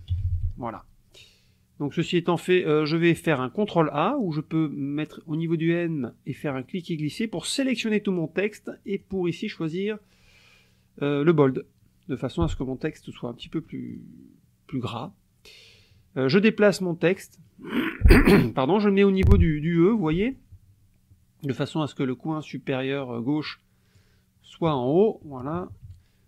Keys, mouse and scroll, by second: 0.0-0.8 typing, 6.4-8.0 drag, 8.9 click, 11.5 click, 13.9 click, 15.1-19.5 drag, 19.7 middle click, 20.6-23.5 scroll up 1, 23.5 click, 25.2 KP_Subtract.